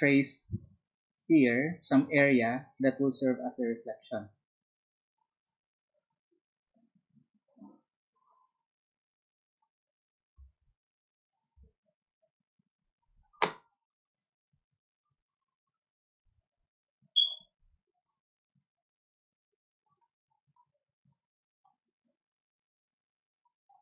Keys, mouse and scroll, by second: 5.6-12.2 ctrl+drag, 14.1-17.6 alt+drag, 21.9-23.8 alt+drag.